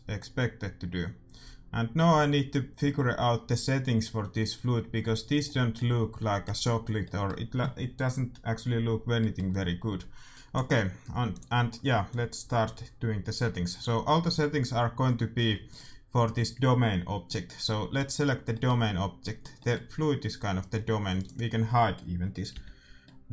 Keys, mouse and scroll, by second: 5.7-10.3 middle drag, 11.3-13.8 drag, 15.4 a, 15.6-17.3 right drag, 17.6-21.1 middle drag, 21.1-22.9 right drag, 22.5 h, 23.1-23.3 middle drag.